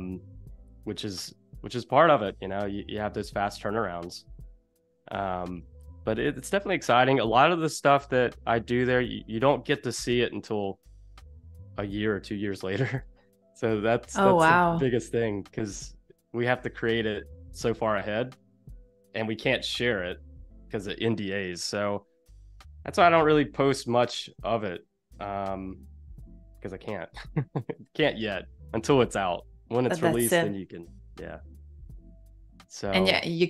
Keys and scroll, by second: 5.7 space, 9.5 space, 10.5 z, 11.0 a, 23.0 shift+c, 24.4 super+z, 27.6 super+-, 28.1 space, 29.9 =, 31.7 a.